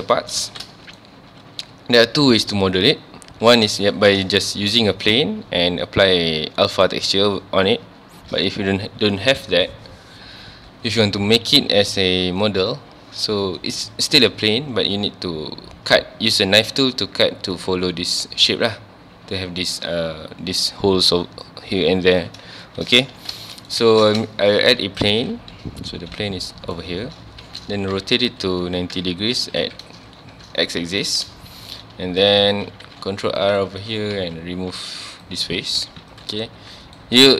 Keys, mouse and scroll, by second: 0.1 shift+middle click, 0.5 ctrl+s, 0.6-3.5 shift+middle drag, 3.5-3.8 scroll down 2, 3.8-6.8 shift+middle drag, 22.6 shift+middle click, 23.1 ctrl+s, 23.5-23.8 shift+middle drag, 23.8 shift+a, 25.4 scroll down 1, 26.0 scroll up 1, 26.2-27.0 middle drag, 27.0-27.4 scroll up 1, 27.9 r, 29.0 KP_Enter, 29.4 KP_1, 29.6 KP_Decimal, 30.4-30.7 scroll down 1, 31.1 shift+middle click, 31.3 scroll up 1, 31.6 Tab, 32.8 ctrl+r, 33.6 right click, 33.8 3, 33.9 click, 34.2 x, 35.8 Tab, 36.1 click, 36.6 g, 37.0 right click, 37.2 click.